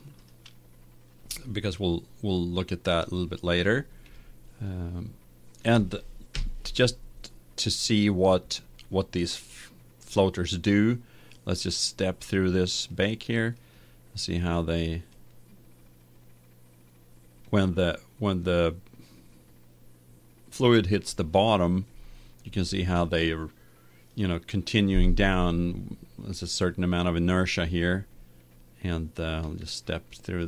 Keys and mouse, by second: 1.7-6.2 middle drag, 6.4 KP_1, 12.3-17.0 drag, 26.1-29.5 middle drag, 30.2 middle click.